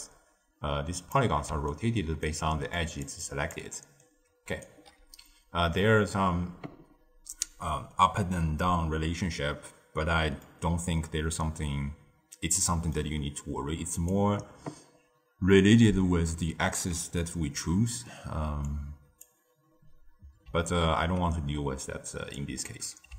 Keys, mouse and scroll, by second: 1.4-4.6 typing, 1.6 right click, 2.7 click, 3.1 click, 4.0-4.6 right drag, 5.2-8.3 middle drag, 10.3-13.4 middle drag, 13.9 click, 18.6 click, 22.3 click.